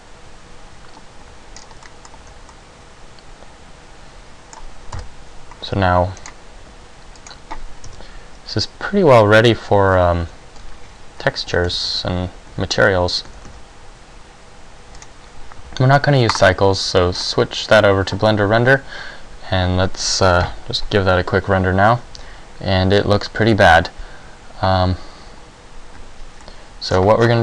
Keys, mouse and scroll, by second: 1.8 scroll down 3, 2.0 middle click, 2.4 a, 2.6 middle click, 5.1 KP_0, 5.9 scroll up 1, 6.4 right click, 6.8 g, 7.4 click, 8.1 KP_1, 10.3 ctrl+alt+KP_1, 11.7 g, 15.2 click, 16.5 click, 26.0 Escape, 26.6 middle click, 27.1-27.4 scroll down 9.